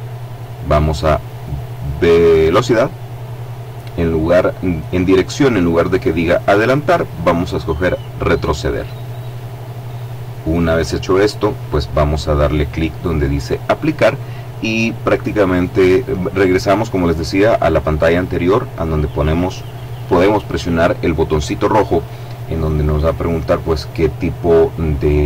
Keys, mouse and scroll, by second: 2.3 click, 6.4 click, 22.9 click.